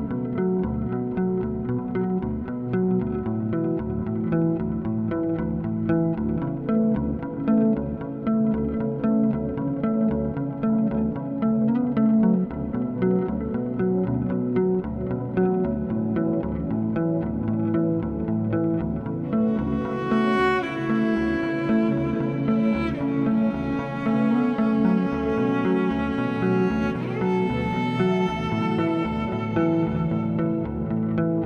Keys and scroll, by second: 4.7 3, 5.0 s, 8.1 s, 16.7 s, 18.5 ctrl+z, 19.0 s, 26.7 3.